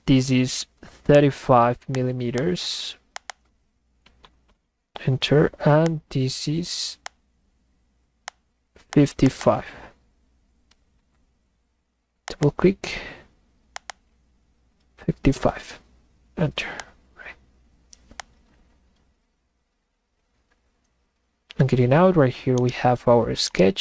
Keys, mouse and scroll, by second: 1.9 click, 2.4 click, 3.3 click, 5.4 scroll up 2, 5.9 click, 7.0 click, 8.3 click, 8.9 click, 9.2 click, 9.4 click, 12.2 click, 13.7 click, 13.9 click, 16.8 click, 22.5 middle click, 22.7 right click, 23.4 middle click, 23.5 right click.